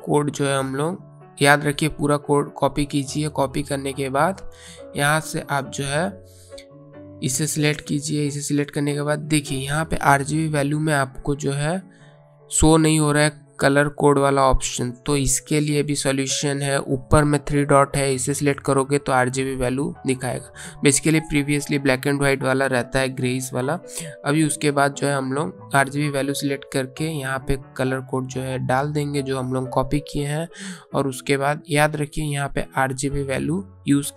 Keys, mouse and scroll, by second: 1.7 right click, 2.7 click, 10.7 click, 17.6 click, 22.7 click, 27.1 ctrl+v, 30.2 click, 33.7 click.